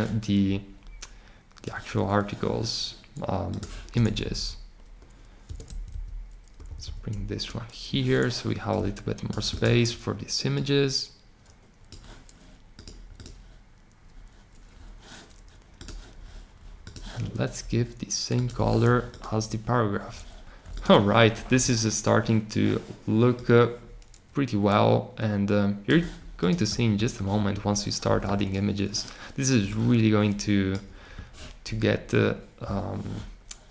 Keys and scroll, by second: 4.1 Down, 4.3 Down, 5.4 Return, 5.6 Up, 5.9 Up, 6.6 shift+Right, 6.8 shift+Right, 16.3 typing, 18.2-18.9 typing.